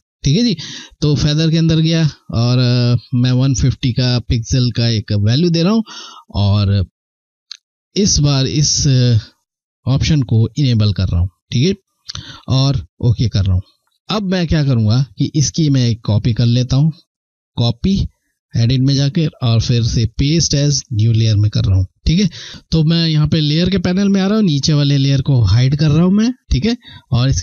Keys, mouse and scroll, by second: 10.1 click, 12.8 click, 14.3 ctrl+scroll down 1, 16.1 click, 24.4 click.